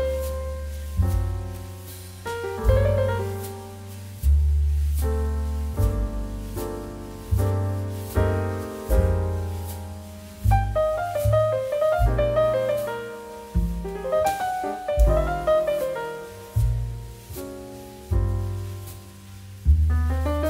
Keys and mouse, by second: 1.5 click, 1.7 middle click, 1.9 shift+middle click, 2.3 middle click, 4.1 click, 4.2 x, 4.9 click, 5.3 shift+click, 6.3 g, 6.8 click, 7.5 middle click, 8.1 shift+middle click, 8.3 click, 9.4 ctrl+s, 10.7 middle click, 11.2 shift+middle click, 12.9 click, 14.4 middle click, 14.6 shift+middle click, 14.9 click.